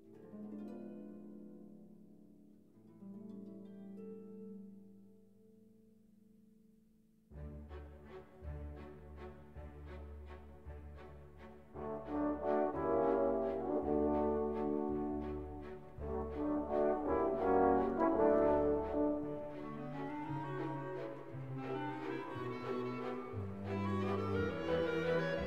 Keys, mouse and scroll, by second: 0.2 click, 1.1 1, 1.7 0, 3.0 click, 3.8 2, 4.3 0, 4.9 click, 5.6 click, 7.1 click, 7.9 1, 8.4 0, 9.6-10.9 drag, 11.5 click, 11.9 click, 13.3 click, 14.1 click, 15.3 click, 16.2 1, 16.7 5, 17.4 click, 18.7 1, 19.1 0, 20.2 click, 20.7 scroll down 2, 22.0 click, 23.4-25.3 drag.